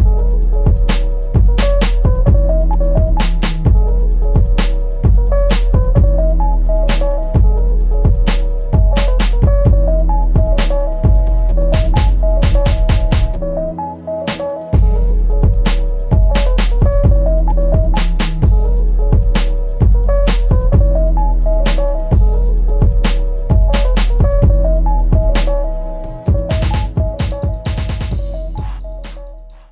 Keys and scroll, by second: 2.2 ctrl+z.